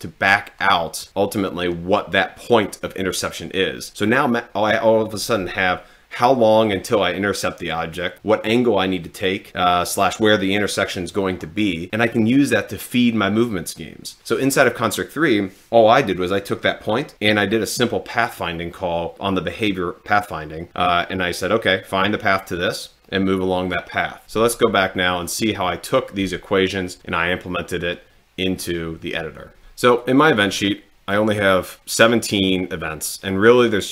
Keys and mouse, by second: 30.0 click.